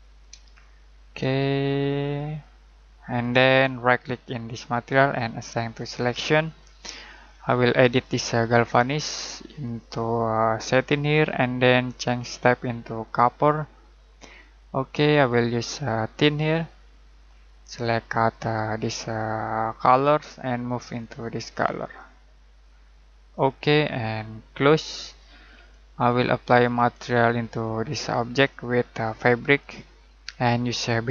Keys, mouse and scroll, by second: 0.4 shift+middle click, 2.0 click, 4.6 right click, 5.7 click, 26.0 middle click, 29.5 click.